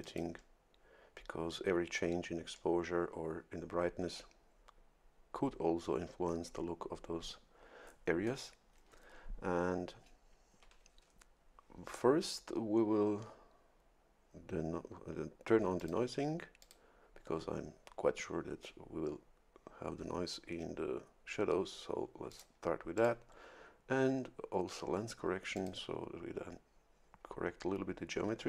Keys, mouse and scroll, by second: 0.0 click, 15.8 click, 16.6 click, 22.3 click, 22.9 click, 25.5 click.